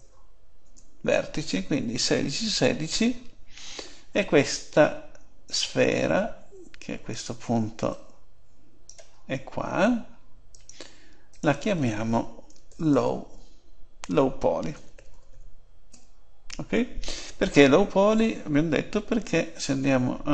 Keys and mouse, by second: 7.9-9.7 drag, 10.5-13.4 drag, 19.2 Tab.